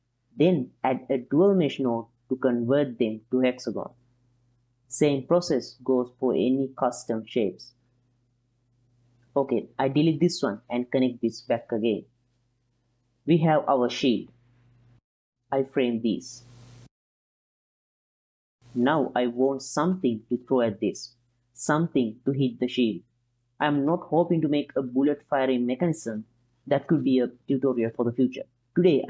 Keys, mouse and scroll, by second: 2.3-2.7 drag, 3.8 alt+shift+click, 5.0-5.5 ctrl+drag, 5.8-7.3 drag, 9.2 click, 9.7 click, 10.7 x, 11.6-12.4 drag, 13.5-14.0 ctrl+drag, 14.3-14.8 drag, 15.2 click, 15.7 shift+p, 15.9 F2, 17.5 click, 18.1 ctrl+s, 19.1-29.0 middle drag.